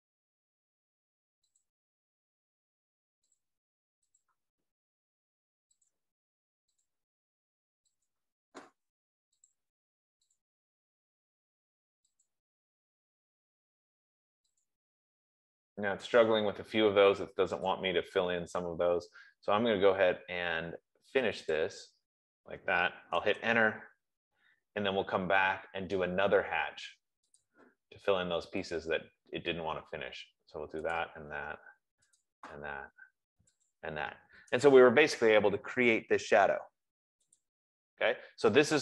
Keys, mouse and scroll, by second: 2.0 click, 3.7 click, 4.5 click, 6.2 click, 7.2 click, 8.4 click, 9.9 click, 10.6 click, 12.6 click, 15.0 click, 18.1 click, 21.9 click, 23.4 click, 27.7 Return, 27.7 click, 29.1 click, 31.2 click, 32.5 click, 34.1 click, 37.9 click.